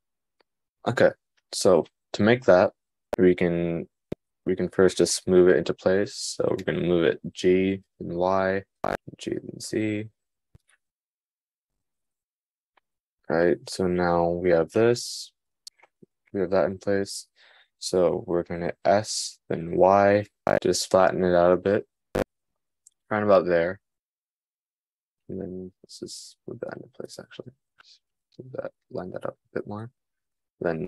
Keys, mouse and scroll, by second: 6.5 g, 9.4 g, 26.2 g.